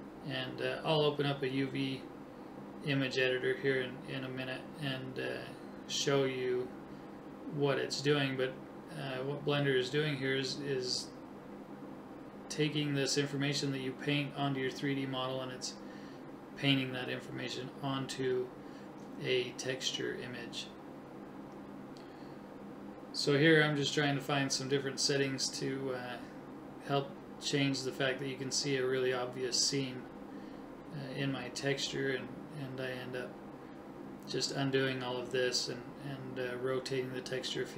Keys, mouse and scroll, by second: 0.0-1.9 right drag, 4.6 click, 6.5 right click, 12.0 click, 14.3 click, 15.0 click, 17.0 click, 20.1 click, 22.9 click, 27.1 right click, 32.6 ctrl+z, 33.1 ctrl+z, 33.5 right click, 34.1 middle click, 35.9 click.